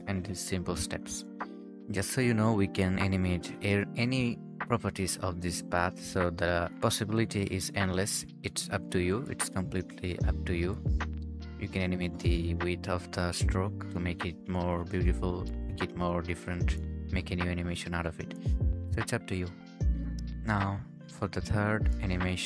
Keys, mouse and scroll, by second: 2.0 Escape, 3.0 ctrl+s, 10.5-12.8 scroll down 1, 20.4 scroll up 1.